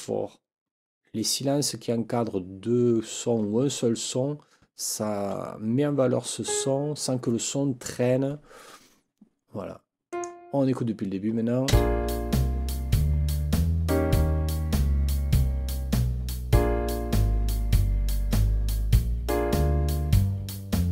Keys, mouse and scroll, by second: 6.4 click, 10.1 click, 11.7 space.